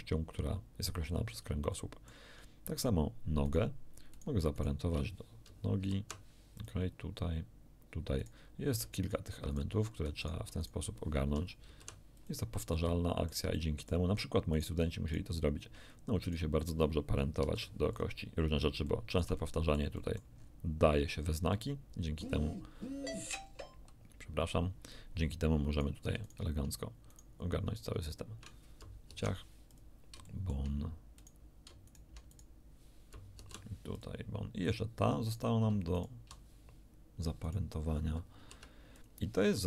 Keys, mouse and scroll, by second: 1.1 scroll down 2, 1.7 shift+middle click, 3.5 right click, 4.1 right click, 4.5 shift+right click, 6.6 ctrl+p, 6.6 ctrl+click, 8.2 right click, 9.0 shift+right click, 9.5 shift+right click, 10.2 shift+right click, 10.6 shift+right click, 11.7 ctrl+p, 12.2 ctrl+click, 12.7-14.1 ctrl+middle drag, 14.5 right click, 15.1 shift+right click, 16.2 shift+right click, 17.4 ctrl+p, 17.9 ctrl+click, 18.5 ctrl+scroll down 2, 18.9-19.9 shift+drag, 20.3-20.7 shift+scroll up 2, 21.5 middle click, 25.7 right click, 26.3 shift+right click, 27.1 shift+right click, 29.1 ctrl+shift+p, 29.7 ctrl+click, 30.3 ctrl+shift+click, 31.2 ctrl+shift+right click, 31.9 ctrl+shift+right click, 32.3 ctrl+shift+right click, 33.3 ctrl+p, 33.9 ctrl+right click, 35.3 right click, 35.9 shift+right click, 37.5 right click, 38.4 ctrl+p, 38.9 ctrl+right click, 39.1 ctrl+click, 39.5 ctrl+scroll down 2.